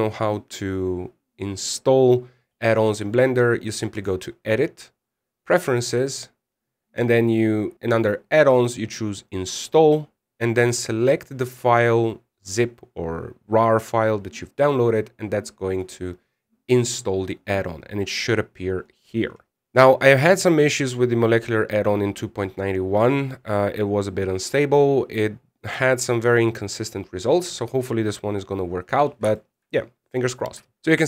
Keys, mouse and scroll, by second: 4.7 click, 19.6-22.8 scroll down 10, 29.3-29.6 scroll up 2, 29.6-30.0 scroll down 4, 30.1 shift+middle click, 30.5 scroll up 2, 30.7 shift+middle click.